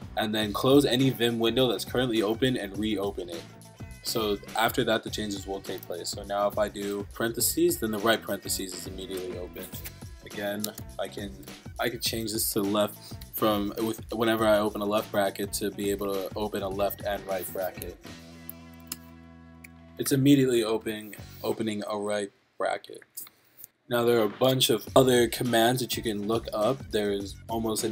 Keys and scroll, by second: 7.8 Right, 12.7 Left, 15.4 Right, 18.7 shift+;, 19.0 Return, 19.5 Up, 19.6 Return, 20.0 [, 20.8 Right.